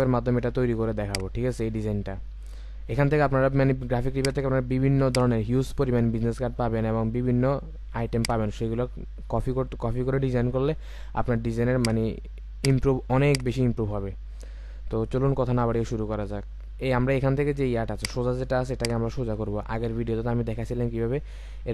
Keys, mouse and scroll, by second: 1.6-2.9 scroll down 1, 19.6-21.7 scroll down 1.